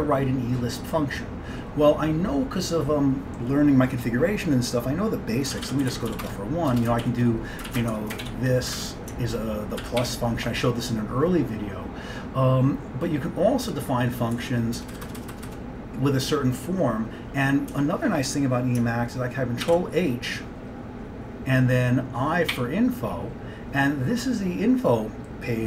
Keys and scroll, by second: 5.5-8.8 typing, 6.8 Return, 9.9 ctrl+x, 10.1-10.8 typing, 13.7-15.4 typing, 17.8 BackSpace, 19.7 ctrl+h, 22.6 i.